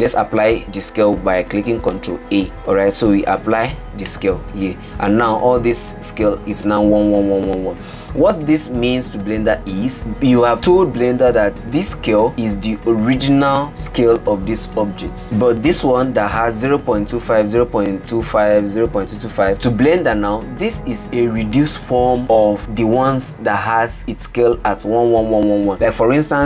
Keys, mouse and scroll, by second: 2.4 ctrl+a, 16.0 click.